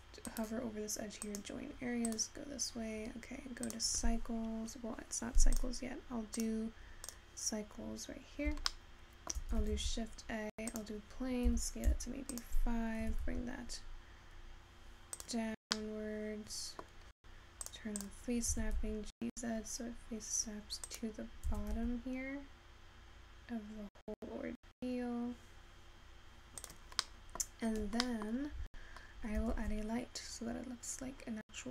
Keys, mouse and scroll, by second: 1.4-3.2 right drag, 3.2-3.9 scroll down 3, 3.9 click, 7.6-8.7 drag, 8.7-11.1 shift+middle drag, 11.1 shift+a, 11.7 s, 13.2 g, 16.2-17.8 middle drag, 17.8 click, 18.1 click, 20.3 g, 21.6 g.